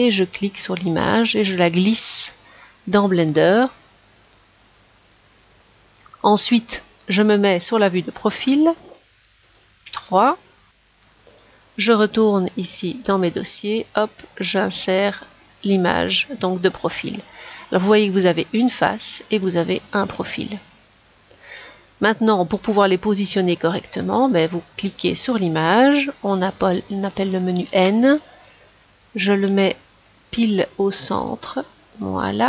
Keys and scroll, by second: 9.1 3, 27.6 n.